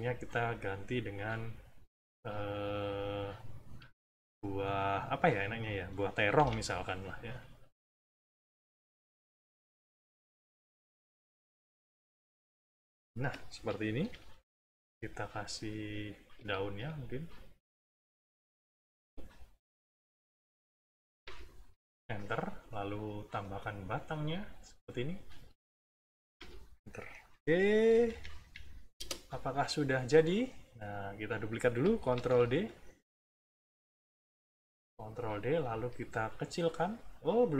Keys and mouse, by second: 0.3 middle click, 6.3 b, 7.3 click, 7.8 click, 9.0 click, 9.9 click, 10.9 click, 12.1 click, 13.1 middle click, 14.0 =, 14.5 middle click, 15.5 click, 15.9 click, 17.0 shift+click, 17.5-18.7 shift+drag, 18.8 shift+click, 19.9 shift+click, 21.2 Return, 22.5 click, 23.0 click, 23.7 click, 24.8 click, 26.3 Return, 26.8 middle click, 27.8 -, 28.9 space, 29.5 click, 30.3 click, 31.1 middle click, 32.1 ctrl+d, 32.6-33.8 ctrl+drag, 35.4 click.